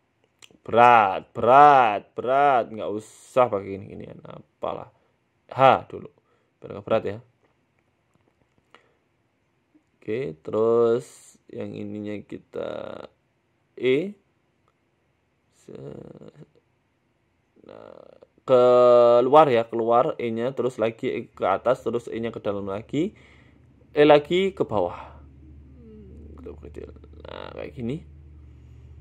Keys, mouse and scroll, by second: 2.4 scroll down 4, 2.4 scroll up 1, 2.6-3.5 scroll down 5, 2.7 middle click, 3.0 Tab, 3.4-3.9 scroll up 6, 3.9 shift+middle click, 4.4 right click, 4.8 middle click, 5.2 shift+right click, 5.9 h, 6.2 middle click, 6.5 shift+middle click, 6.9 KP_1, 7.5 right click, 7.6 Tab, 8.2 KP_Decimal, 9.5 Tab, 9.9 middle click, 10.3 Tab, 11.3-13.3 typing, 11.7 alt+shift+Right, 12.8 alt+shift+Right, 15.3 e, 15.3 s, 16.1 w, 17.4 e, 20.6 e, 21.0 s, 22.5 e, 23.5 s, 25.2 e, 26.5 s, 27.0 Tab, 27.2-28.5 scroll down 5, 27.3 middle click, 27.9 middle click, 28.5 middle click, 28.8 scroll down 1.